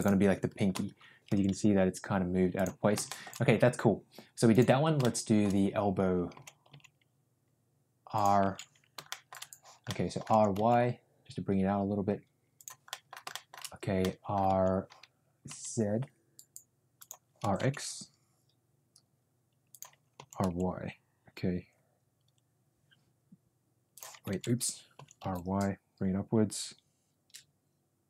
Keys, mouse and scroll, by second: 1.2 r, 3.0 middle click, 4.9-5.3 shift+middle drag, 6.3 r, 8.7 ctrl+z, 9.0 shift+middle click, 9.8-10.1 middle drag, 10.2 r, 12.8 middle click, 13.2 shift+middle click, 13.9 middle click, 14.4 r, 17.3 r, 20.1 r, 24.5 ctrl+z, 24.9 r.